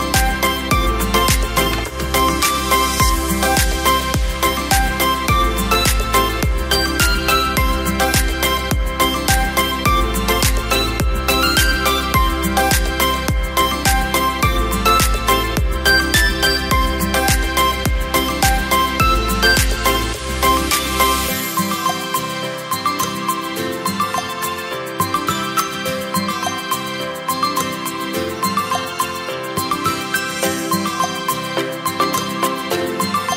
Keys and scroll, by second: 0.3 space.